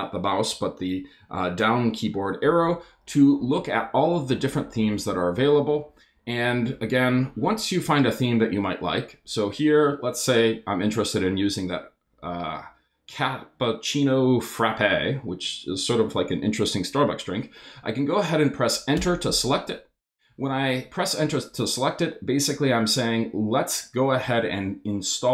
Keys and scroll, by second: 2.4 Down, 18.9 Return.